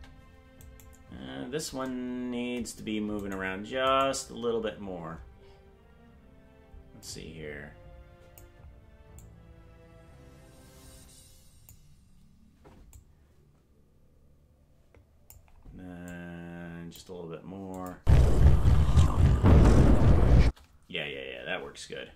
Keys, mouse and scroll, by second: 0.7 right click, 3.2 right click, 4.0 right click, 5.2 scroll up 5, 7.0-8.4 drag, 9.1-11.7 drag, 13.0-15.4 drag, 16.1 click, 17.7 click, 17.9 space, 20.3 space.